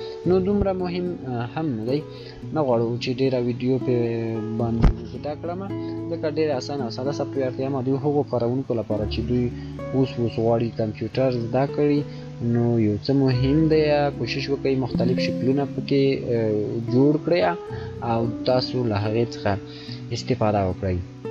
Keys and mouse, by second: 5.2 shift+click, 7.5 shift+click, 7.5 shift+click, 11.1 shift+click, 16.2 shift+click.